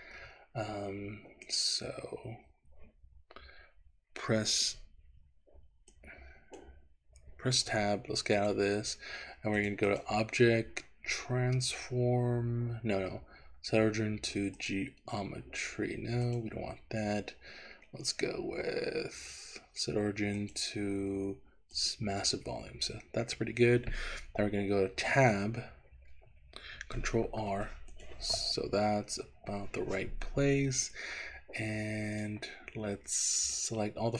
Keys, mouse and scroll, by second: 1.5 click, 6.1 click, 7.7 Tab, 8.4 click, 9.6 click, 10.0-14.7 drag, 16.3-22.1 drag, 25.1 Tab, 27.3 ctrl+r, 29.2 Escape, 31.0-32.3 drag, 33.4 click.